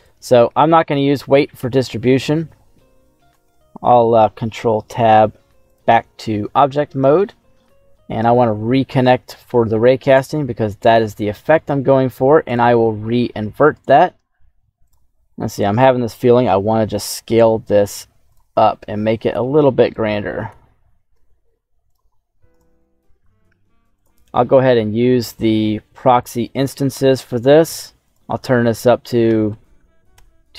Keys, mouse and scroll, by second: 3.3 ctrl+Tab, 6.5-7.1 scroll down 1, 7.1 shift+middle click, 7.9-8.6 scroll down 2, 8.2 middle click, 9.3 click, 10.6 middle click, 11.5 middle click, 12.4 click, 13.7 right click, 14.8 right click, 14.8 s, 15.1-15.7 scroll down 2, 15.7 right click, 16.4 s, 18.2 click, 18.5-18.9 scroll down 3, 18.9 middle click, 19.8 right click, 20.4 g, 21.1 z, 21.8 click, 22.0 middle click, 22.4 right click, 26.1 click, 28.0-30.1 drag, 29.6 KP_0, 29.7 KP_0.